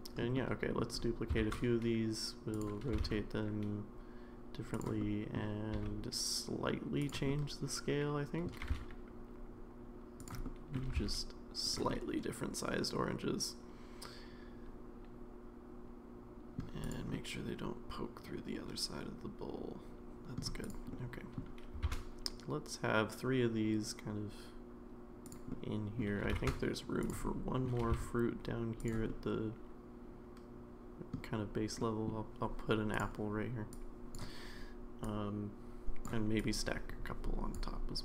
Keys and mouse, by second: 0.3-0.8 middle drag, 1.4 shift+d, 2.9 r, 5.0-5.4 middle drag, 5.8 s, 7.3-8.5 middle drag, 8.6 g, 10.4 middle click, 10.9 g, 11.9-16.6 middle drag, 17.1-20.4 middle drag, 20.9-21.4 middle drag, 21.9 shift+d, 25.5 middle click, 26.2 g, 27.2-27.6 middle drag, 27.8 g, 29.1-31.1 middle drag, 31.9 middle click, 33.7 click, 35.1 click, 36.4-37.5 drag.